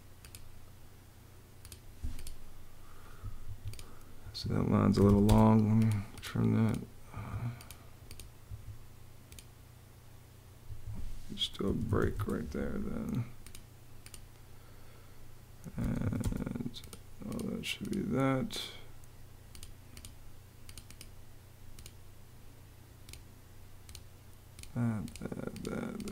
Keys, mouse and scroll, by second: 3.1 Escape, 4.2 Escape, 4.4-5.2 typing, 6.8 Escape, 8.1 Escape, 10.3 Escape, 11.1-12.2 typing, 15.2-16.2 typing.